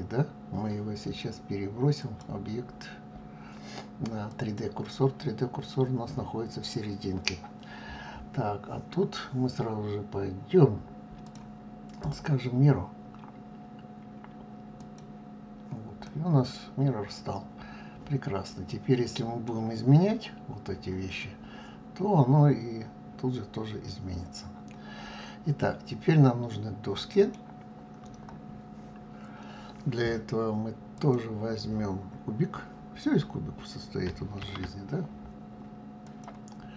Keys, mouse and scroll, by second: 2.0-5.0 drag, 11.2 click, 12.0-15.1 drag, 16.0-19.1 middle drag, 21.2-24.2 middle drag, 30.9 click, 34.4 shift+a.